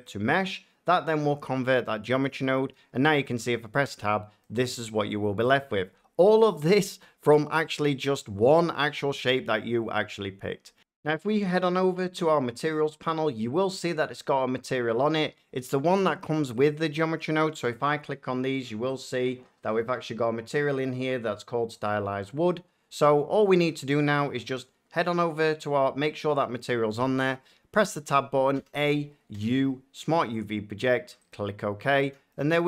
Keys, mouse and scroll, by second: 0.0 click, 2.5 Tab, 3.9 middle click, 4.5 shift+middle click, 10.4 F9, 12.6 click, 16.1 shift+middle click, 16.5 click, 18.9 click, 23.0 click, 23.4 shift+middle click, 25.0 click, 27.7 Tab, 28.5 a, 30.3 click, 31.2 click, 32.0 Tab.